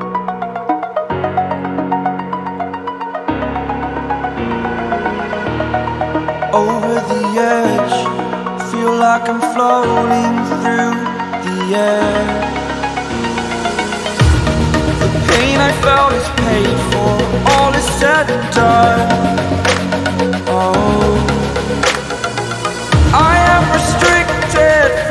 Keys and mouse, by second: 0.2 Down, 0.7 Return, 2.0 right click, 3.6 right click, 3.7 click, 5.0 click, 6.3 click, 8.0 ctrl+t, 9.3 click, 10.2-11.1 typing, 12.6 click, 16.1 click, 21.3 Return, 23.2 click, 24.9-25.1 right drag.